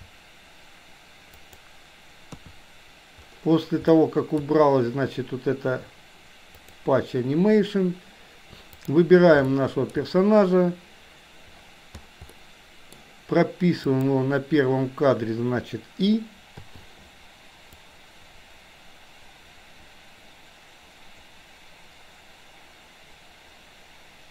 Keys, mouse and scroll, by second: 0.0 r, 2.5 KP_3, 4.0 middle click, 8.7 click, 9.5-10.0 shift+middle drag, 12.4 middle click, 14.0 click, 16.7 i, 17.9-24.3 drag.